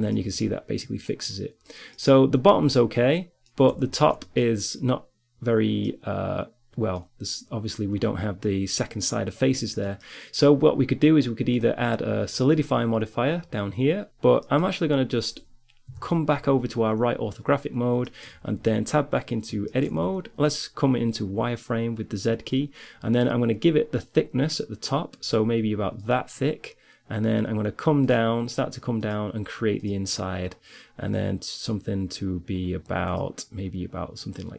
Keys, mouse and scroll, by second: 0.2 middle click, 1.1-4.6 middle drag, 4.6-11.6 middle drag, 11.6-13.6 drag, 14.7 middle click, 15.2 KP_3, 18.1 Tab, 19.7 z, 26.2 click, 27.3-31.7 drag, 33.2-34.5 middle drag.